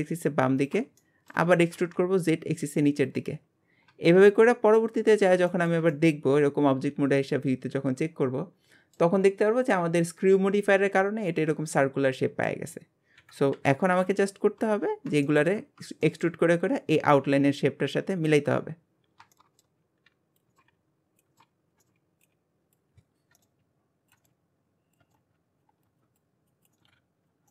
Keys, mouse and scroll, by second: 1.0 shift+middle click, 1.5 e, 3.6 scroll down 5, 3.9 Tab, 4.3-4.9 middle drag, 4.9 alt+z, 5.2-5.5 scroll down 2, 5.5-8.9 shift+middle drag, 11.0-13.2 middle drag, 13.2 KP_1, 14.6 Tab, 15.0 scroll down 2, 15.2 shift+middle click, 15.6-16.0 scroll up 3, 16.0 shift+middle click, 16.6 scroll down 1, 18.3-19.5 scroll up 13, 19.3 shift+middle click, 19.6 shift+middle click, 19.8-22.3 typing, 20.4 scroll down 3, 20.5 shift+middle click, 21.3 scroll down 1, 21.3 shift+middle click, 21.8 shift+middle click, 23.4 shift+middle click, 23.6 e, 24.2 shift+middle click, 24.3 e, 25.0 shift+middle click, 25.2 e, 25.7 scroll up 2, 25.8 click, 26.0 shift+click, 26.2 click, 26.6 click, 26.7 shift+middle click, 26.9-27.5 typing, 27.4 scroll down 2.